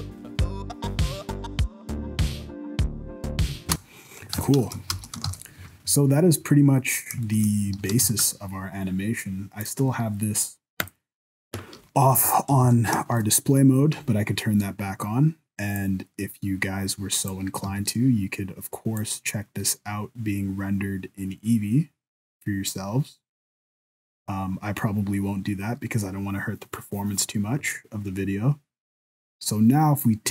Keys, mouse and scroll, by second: 3.6 space, 4.4 ctrl+s, 4.9 shift+Left, 5.3 ctrl+s, 5.9 scroll down 4, 6.1-6.7 scroll up 5, 6.9 middle click, 7.3 shift+middle click, 7.3 shift+scroll up 1, 7.6 scroll down 2, 7.8 alt+a, 8.0 ctrl+s, 8.2 right click, 9.6 click, 10.9 click, 12.1 alt+a, 12.4 scroll up 3, 12.6 ctrl+s, 13.0 shift+middle click, 13.3-13.9 scroll up 2, 15.8 click, 17.6 z, 19.1 click.